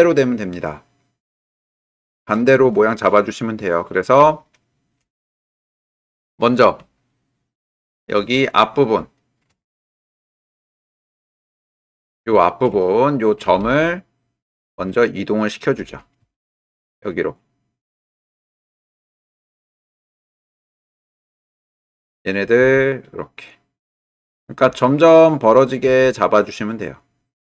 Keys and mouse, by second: 3.4 middle click, 4.4 shift+middle click, 7.1 ctrl+middle click, 8.7 middle click, 10.2 ctrl+middle click, 11.5 alt+middle click, 12.5 shift+click, 13.0 ctrl+click, 15.1 shift+click, 16.2 g, 18.5 click, 19.6 g, 21.0-22.6 drag, 22.6 g, 25.8 g.